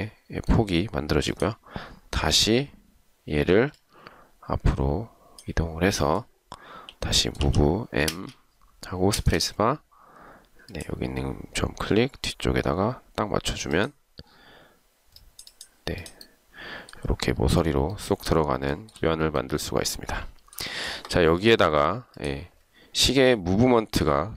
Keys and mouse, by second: 7.6 m, 9.2 space, 18.9 shift+right click.